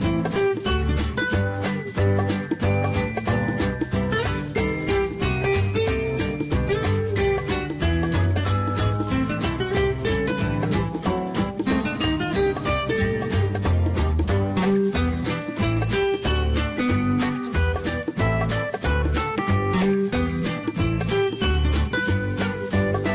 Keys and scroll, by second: 2.6-3.9 typing, 10.8 ctrl+z.